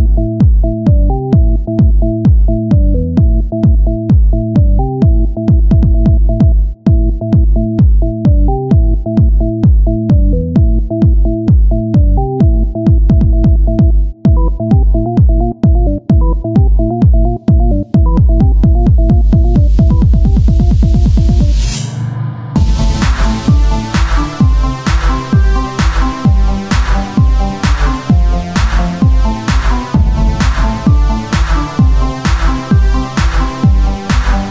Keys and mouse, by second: 0.5 right click, 1.1 KP_1, 2.0 e, 4.3-6.6 drag, 7.2 KP_1, 8.5 e, 11.1-13.8 drag, 13.8 KP_1, 15.3 e, 19.5 z, 20.0 Tab, 21.7 KP_1, 22.5 z, 30.3 shift+a, 33.2 s.